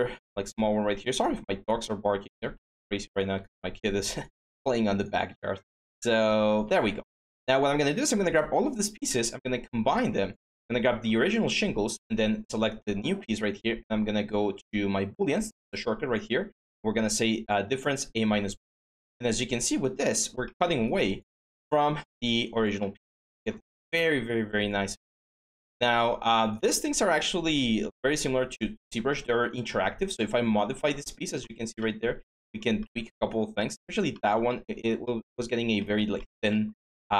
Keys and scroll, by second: 2.3 ctrl+d, 3.1 ctrl+z.